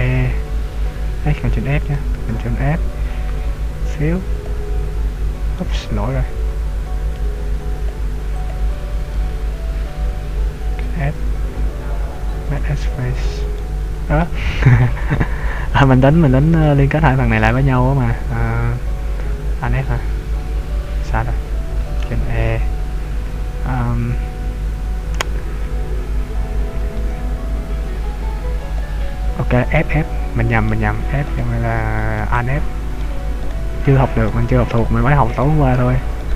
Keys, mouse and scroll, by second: 1.9 ctrl+f, 5.7 middle click, 7.8 click, 8.4 click, 9.5 ctrl+z, 11.0 ctrl+f, 13.6 middle click, 15.0 ctrl+z, 15.7-16.6 scroll up 1, 16.6 right click, 17.5 shift+right click, 20.0 alt+f, 21.1 ctrl+z, 22.0 ctrl+e, 26.7 ctrl+f, 29.5-29.8 scroll down 1, 29.8 middle click, 31.3 right click, 32.4 middle click, 33.6 shift+right click, 33.9 f, 34.3 middle click, 35.4 right click.